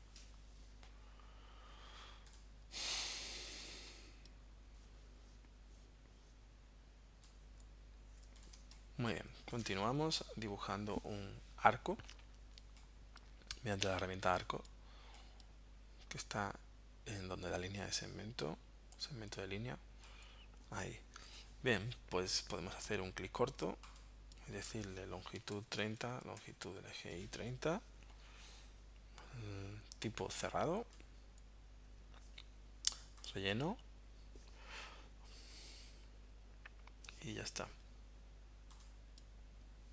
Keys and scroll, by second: 3.2 v, 8.6 space, 25.2-26.9 typing, 26.9 Tab.